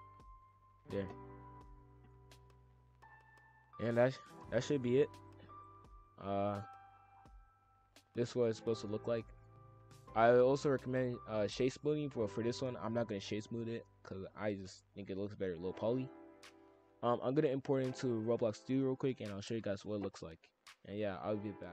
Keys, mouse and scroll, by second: 0.8 shift+f, 4.8 click, 5.2 click, 5.5-6.5 drag, 6.7-7.1 middle drag, 7.1-7.6 scroll down 6, 7.6 scroll up 1, 7.7-9.3 middle drag, 9.3-10.5 scroll up 4, 9.4 middle drag, 10.7 click, 11.2 g.